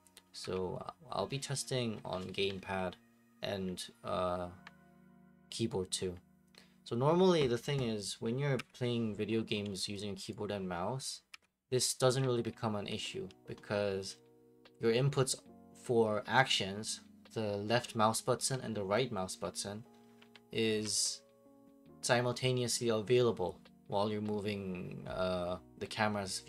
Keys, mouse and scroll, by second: 0.5 F8, 1.5 right click, 2.6-3.6 drag, 8.5 F8, 10.3 click, 11.3 F8, 11.9 click, 12.2-12.7 typing, 19.8-20.9 typing.